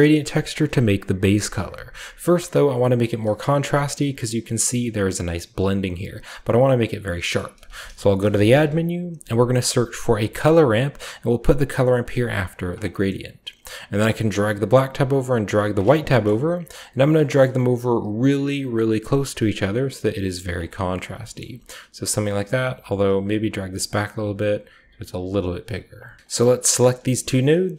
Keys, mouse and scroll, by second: 1.4-2.5 scroll down 1, 2.6-3.2 scroll up 1, 3.2-7.0 scroll up 1, 3.9-7.0 shift+middle drag, 7.0-7.6 scroll down 1, 7.3 middle click, 7.5-8.4 typing, 7.6 shift+click, 10.3 click, 11.5 click, 11.9 click, 12.4 click, 13.0-14.1 scroll up 1, 14.1-14.6 drag, 15.1-17.4 drag, 15.8-16.7 scroll down 1, 16.2-17.2 shift+middle drag, 17.4-18.4 middle drag, 17.4-18.4 scroll up 1, 18.4 scroll up 1, 18.5-18.8 drag, 19.0-20.5 drag, 20.6-22.1 scroll down 1, 22.1-22.8 shift+drag, 23.0 click, 23.7-24.6 drag, 24.6 typing, 24.9 click, 25.3 click, 25.9-26.9 typing, 26.2 click, 26.5 drag, 27.2-27.7 drag.